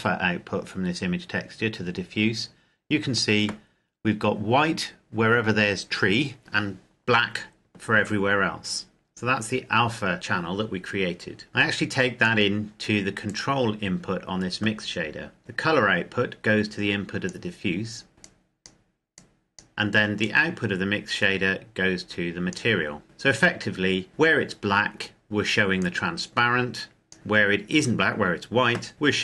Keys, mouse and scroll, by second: 3.3-4.5 scroll up 1, 4.5-6.4 scroll down 1, 11.5 click, 15.4 click, 19.9 click, 25.5 click.